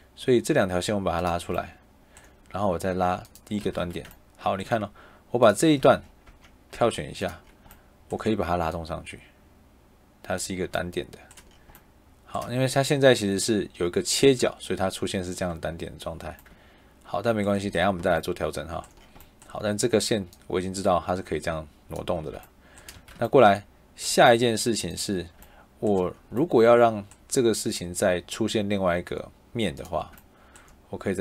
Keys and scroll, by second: 3.5 Escape, 5.7 Escape, 6.1 Tab, 22.8 Escape.